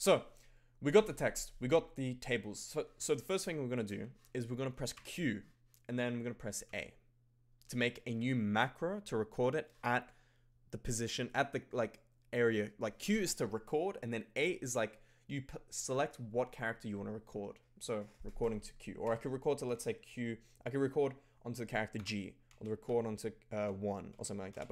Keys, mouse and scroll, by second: 3.4 alt+click, 4.9 q, 6.6 a, 19.1 q, 19.7 q, 21.9-24.7 typing.